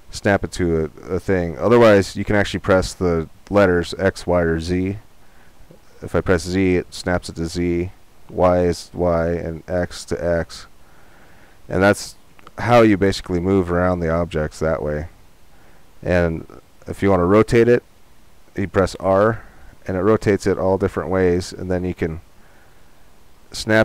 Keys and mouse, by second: 18.1 r.